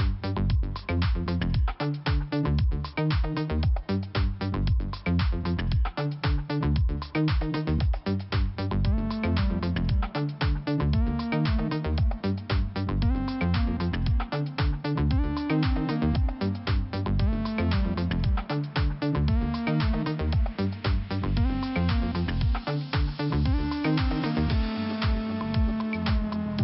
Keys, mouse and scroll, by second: 0.8 scroll down 1, 1.6 scroll up 1, 2.2 click, 3.8 click, 5.7 click, 8.1 click, 9.0 click, 12.0 click, 14.3 click, 14.8 click, 15.7 click, 16.2 click, 17.6 click, 18.2 click, 19.7 click, 21.1 click, 22.2 click, 24.2 click, 25.1 click, 26.1 click.